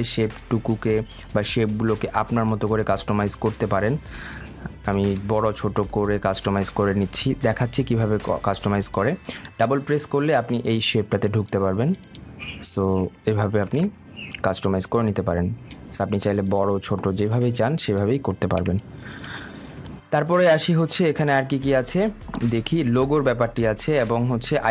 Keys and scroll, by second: 14.1 ctrl+z.